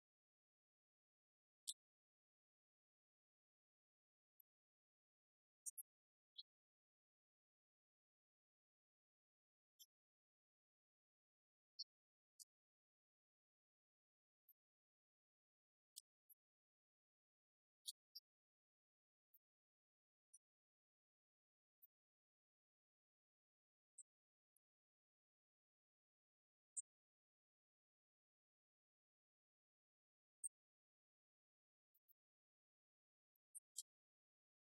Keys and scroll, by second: 0.5 Right, 0.9 Left, 1.5 shift+Right, 3.3 shift+Left, 8.6 Right, 10.7 Left, 27.6 Right, 27.8 Left.